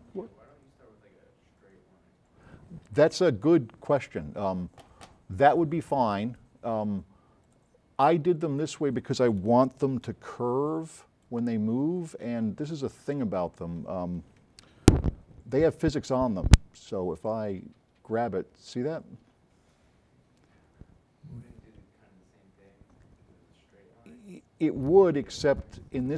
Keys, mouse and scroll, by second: 7.5 click, 8.2-8.9 scroll up 4, 9.9 s, 10.0-11.2 right drag, 11.7 scroll down 2, 11.8 middle click, 13.0 click, 13.0 right click, 15.1 v.